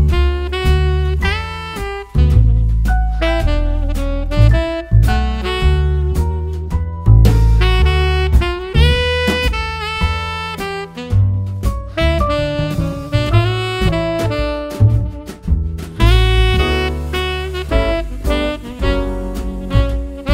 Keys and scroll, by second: 0.0 BackSpace.